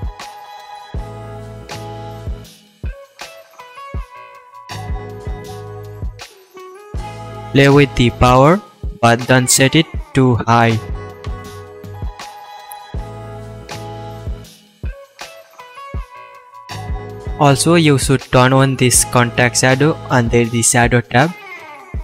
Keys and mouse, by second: 0.2 KP_7, 8.9 KP_0, 16.4 h, 17.2 ctrl+z, 18.9-22.0 middle drag.